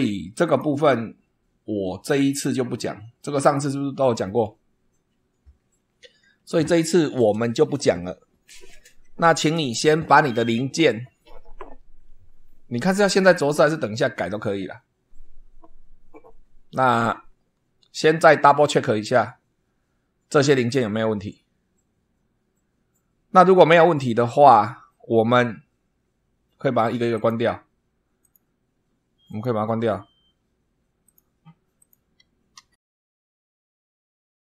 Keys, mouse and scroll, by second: 0.4 click, 27.1 click, 28.2 click, 29.3 click, 31.0 click, 31.8 click, 32.5 ctrl+w, 32.8 ctrl+click, 33.5 ctrl+click, 33.9 ctrl+w, 34.2 ctrl+click.